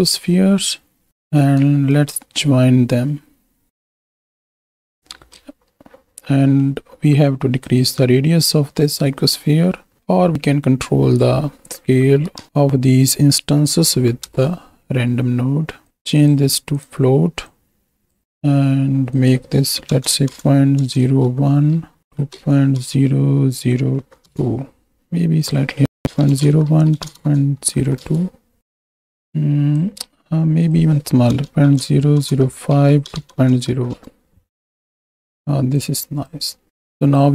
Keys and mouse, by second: 2.4 ctrl+shift+click, 3.9 click, 5.5 ctrl+space, 6.5 middle click, 7.7-8.9 drag, 10.0-14.8 drag, 16.2-16.9 drag, 17.5-18.2 drag, 19.2-24.3 drag, 25.5-28.0 drag, 28.6-29.8 drag, 30.7-33.9 drag, 35.7 click, 36.7 click.